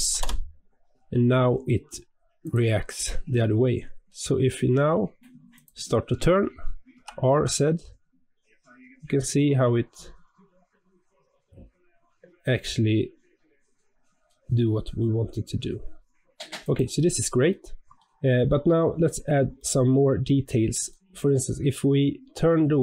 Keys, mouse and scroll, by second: 2.3 click, 2.9-4.6 middle drag, 4.6-5.4 scroll down 2, 5.4 click, 6.8 r, 16.9 scroll down 3, 17.4-18.8 middle drag, 18.8 scroll up 2, 19.5-21.4 shift+middle drag, 21.4 scroll up 2, 21.9-22.8 scroll down 1.